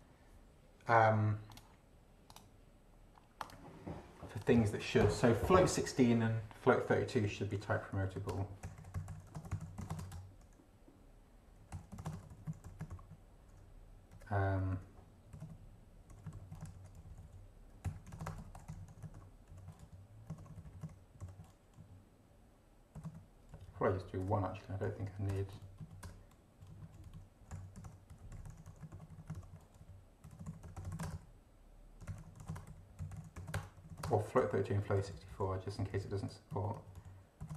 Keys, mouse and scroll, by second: 1.5 click, 2.3 click, 3.4 click, 4.4 click, 7.1-8.0 typing, 8.2 ctrl+Right, 8.3 ctrl+Return, 8.6 ctrl+i, 8.8 ctrl+m, 9.0 ctrl+p, 9.1 ctrl+o, 9.2 ctrl+r, 9.3 ctrl+t, 9.4 ctrl+space, 9.4 ctrl+t, 9.5 ctrl+o, 9.6 ctrl+r, 9.8 ctrl+c, 9.9 ctrl+space, 10.1 ctrl+Return, 11.3-14.8 typing, 16.1 0, 16.7 ctrl+shift+Left, 17.6-21.2 typing, 21.8 shift+Right, 23.0 ,, 23.0 space, 23.5 Left, 24.2 BackSpace, 24.8 Left, 25.3 BackSpace, 25.6 Right, 26.0 BackSpace, 26.7 Right, 27.2-34.4 typing, 36.5 ctrl+Right, 37.0 ctrl+Left, 37.4 ctrl+,, 37.5 ctrl+space.